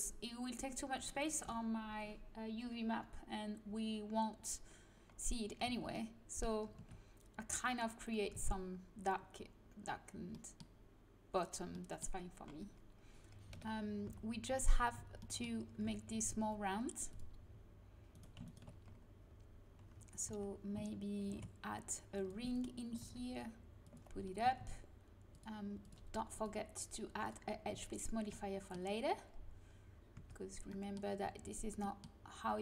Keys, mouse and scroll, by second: 5.6 z, 6.7 Tab, 8.3 Tab, 13.5 KP_1, 14.0 z, 14.9 z, 15.8 Tab, 20.2 a, 21.2 ctrl+r, 22.9 g, 24.4 a, 24.6 Tab, 30.1 Tab.